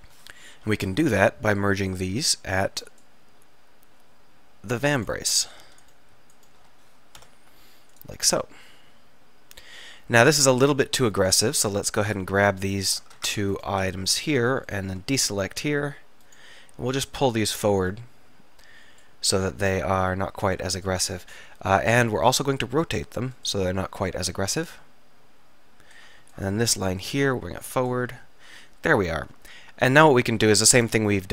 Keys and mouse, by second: 0.9 alt+m, 4.4 click, 5.1-7.3 drag, 7.3 alt+m, 8.9-10.0 middle drag, 11.9-13.2 middle drag, 13.2 ctrl+z, 14.2-15.2 middle drag, 15.8-17.4 drag, 17.4-19.1 middle drag, 21.5 KP_7, 22.6 r, 29.2 middle click, 30.8 ctrl+r.